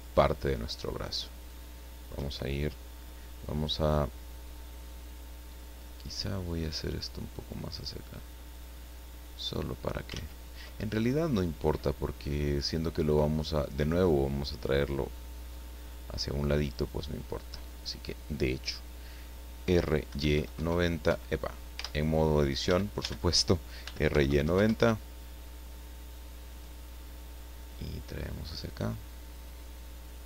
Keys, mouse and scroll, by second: 0.0 shift+right click, 1.4 shift+right click, 6.6-8.6 drag, 8.8-10.0 middle drag, 10.1 ctrl+z, 11.0 ctrl+scroll down 2, 11.4 middle click, 12.7-13.0 scroll up 2, 13.4 scroll down 2, 16.7 right click, 19.6 r, 20.1 y, 20.3 KP_9, 20.5 KP_0, 21.0 Escape, 21.7 Tab, 22.6 a, 23.8 r, 24.1 y, 24.2 KP_9, 24.4 KP_0, 24.6 KP_Enter, 27.7-29.5 drag.